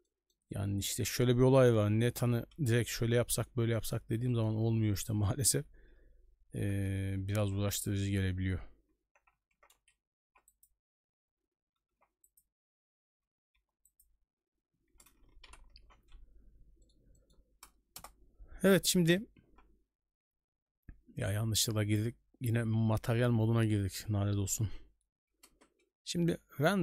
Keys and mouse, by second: 0.0 middle click, 2.9 Escape, 3.7 middle drag, 4.3 shift+middle click, 5.0 right click, 7.4 ctrl+b, 9.5 ctrl+b, 13.5 shift+b, 15.5 shift+b, 16.8 middle drag, 17.1 shift+middle drag, 17.9 KP_0, 19.4 z, 25.5 ctrl+space.